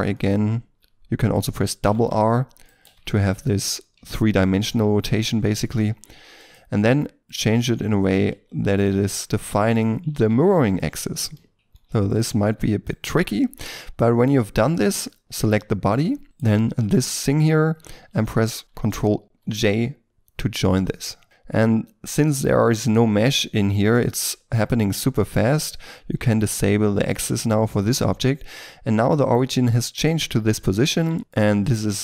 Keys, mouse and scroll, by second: 0.7 r, 1.8 r, 2.0 r, 2.6 right click, 2.8 r, 3.0 r, 6.8 r, 7.7 r, 8.3 g, 9.0 r, 10.1 r, 10.3 r, 11.0 middle click, 11.5 r, 12.4 g, 13.3 middle click, 15.2 right click, 15.7 shift+middle click, 16.2 shift+right click, 21.2 shift+middle click, 23.3 middle click, 27.9 middle click, 30.4 scroll up 1, 30.5 Tab, 30.9 middle click.